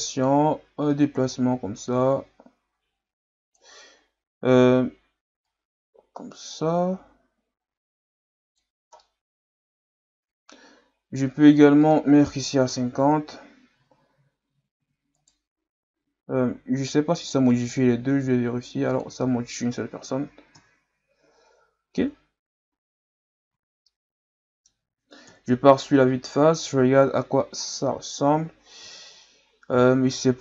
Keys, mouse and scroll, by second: 0.9-4.0 drag, 5.4-8.5 drag, 9.0-11.8 middle drag, 11.8-14.8 drag, 14.8 Tab, 15.2 right click, 17.5-21.9 drag, 22.1 Tab, 22.7 a, 23.1 Tab, 23.5 a, 23.8-25.3 middle drag, 25.3 KP_1, 26.0-27.6 scroll down 6, 27.6-28.5 scroll down 1, 29.0-29.4 scroll down 1, 29.4-30.0 scroll up 3, 30.0-30.4 scroll up 7.